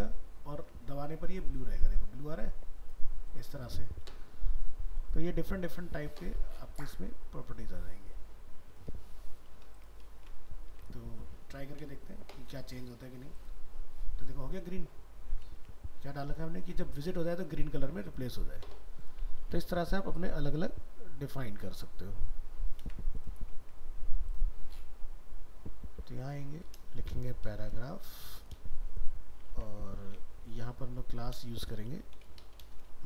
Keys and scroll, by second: 10.1 ctrl+s, 10.7 alt+Tab, 15.6 alt+Tab, 19.5 ctrl+w, 22.8 ctrl+c, 29.5 ctrl+v.